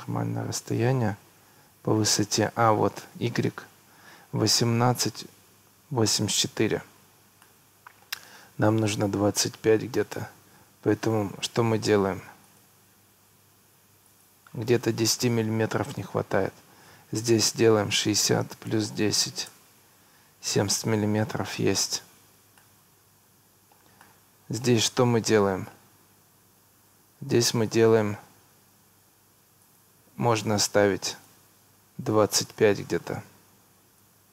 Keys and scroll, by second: 6.8 Escape, 17.6 6, 19.1 1, 19.3 0, 19.5 Return, 21.9 Escape, 33.5 2, 33.8 5, 34.1 Return.